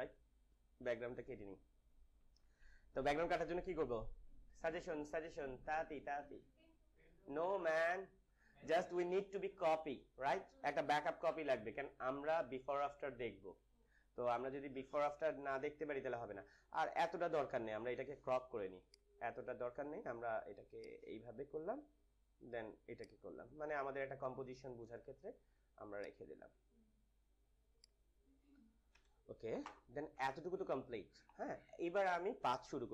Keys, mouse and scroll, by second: 2.1 ctrl+=, 10.6 ctrl+=, 11.2 j, 15.5 ctrl+j, 15.7 ctrl+-, 16.7 ctrl+-, 18.7-28.8 drag, 28.9 Return, 30.6 ctrl+0, 31.1 -.